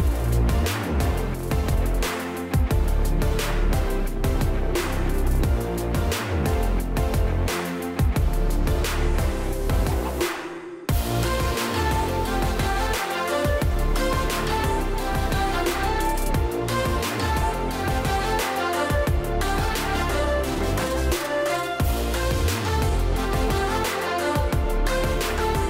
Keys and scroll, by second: 0.3 space, 6.3-6.9 ctrl+space, 13.3 space.